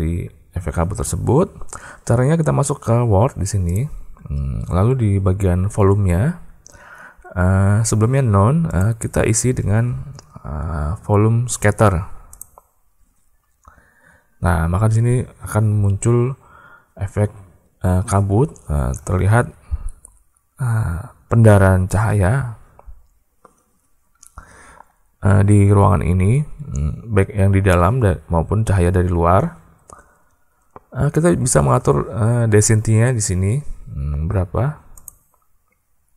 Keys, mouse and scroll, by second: 3.5 click, 8.5-12.4 drag.